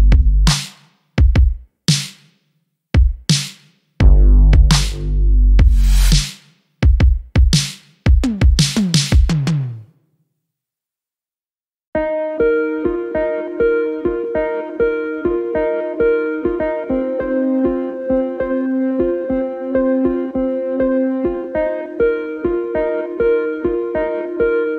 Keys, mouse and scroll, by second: 2.0 ctrl+z, 2.8 x, 6.5 click, 8.2 e, 11.8 Tab, 12.8 s, 14.9 ctrl+z, 15.5 s, 17.0-17.9 scroll up 1, 17.9 click, 19.2-20.7 shift+middle drag, 20.7-21.5 scroll up 2, 22.0 click, 23.7 click.